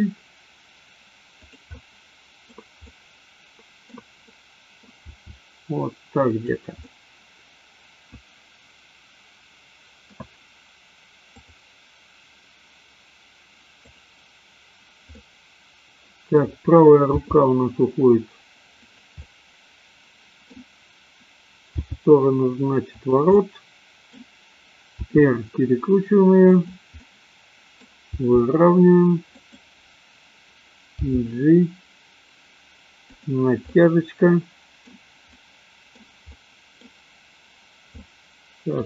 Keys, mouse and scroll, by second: 1.8-2.4 middle drag, 2.9-3.9 middle drag, 4.3 middle click, 5.2 r, 6.9-10.2 middle drag, 15.2-16.3 middle drag, 17.2 g, 19.2-20.6 middle drag, 21.8 g, 23.4 middle click, 25.1 r, 27.1-27.9 middle drag, 28.1 r, 29.4 click, 31.2 g, 33.7-34.9 middle drag, 35.3-36.1 middle drag, 36.2-36.8 middle drag, 38.1-38.7 middle drag.